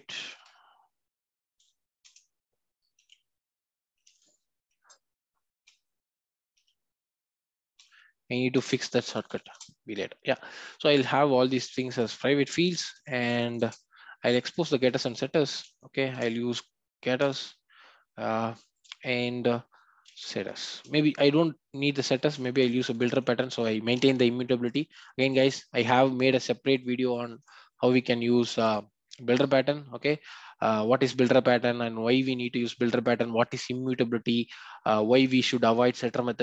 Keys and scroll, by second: 2.0 Return, 17.2 Return, 27.3 alt+Return.